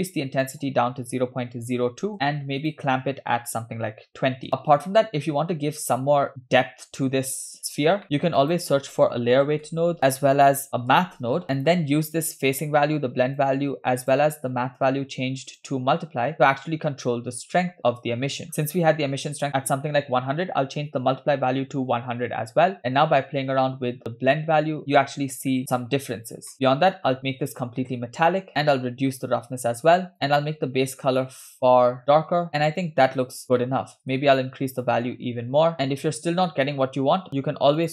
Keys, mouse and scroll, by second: 0.4-2.1 drag, 2.6-4.5 drag, 5.5-5.9 scroll up 2, 8.0 middle click, 8.0 shift+a, 12.5-13.6 drag, 14.0-15.7 drag, 16.4-17.6 drag, 18.1-18.9 scroll up 4, 19.5-22.0 drag, 21.6 0, 22.8-24.8 shift+drag, 26.5 shift+middle click, 26.9 click, 28.5-30.2 drag, 32.5 scroll down 4, 33.6 middle click, 34.8-35.9 drag, 35.7 scroll down 2, 37.4 shift+a.